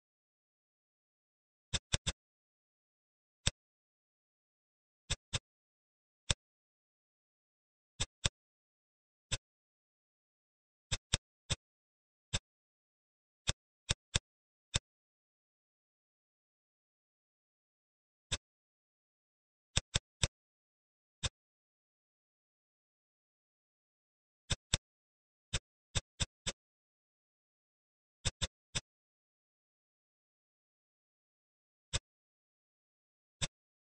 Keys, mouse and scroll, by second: 0.3 g, 1.8 click, 2.0-3.1 middle drag, 3.1 ctrl+r, 5.3 click, 5.9 ctrl+r, 8.1 click, 8.8 ctrl+r, 11.0 click, 11.4 middle click, 11.9-12.2 scroll up 1, 12.2-13.4 middle drag, 13.4 click, 13.7 click, 14.1-15.4 middle drag, 15.4 e, 18.8 ctrl+b, 19.8 click, 20.2 middle click, 20.8-21.1 scroll up 1, 21.1-22.7 middle drag, 23.0 ctrl+r, 24.7 click, 25.5 click, 25.9 click, 26.1 shift+click, 26.4 shift+click, 27.0 e, 28.3 click, 28.7-30.2 middle drag, 30.4-31.5 middle drag, 31.5 scroll up 1, 31.8 middle click, 32.5-33.4 scroll up 1, 33.4 click.